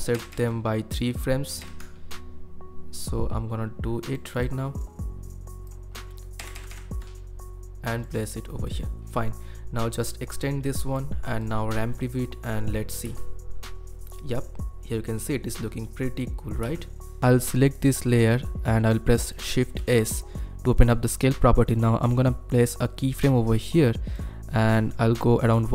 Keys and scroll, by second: 0.1 ctrl+Right, 0.3 ctrl+Right, 1.6 ctrl+Right, 6.4 ctrl+Right, 6.5 ctrl+Right, 6.7 ctrl+Right, 17.2 ctrl+F1, 19.8 shift+s.